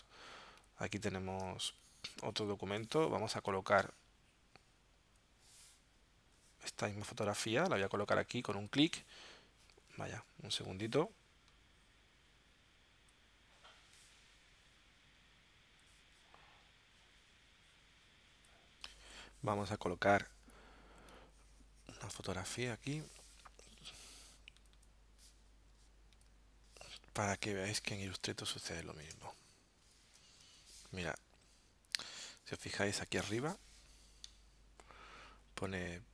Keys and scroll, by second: 1.5 space, 10.1 super+z, 28.1 z, 29.1 space, 30.4 v, 34.3 alt+super+0.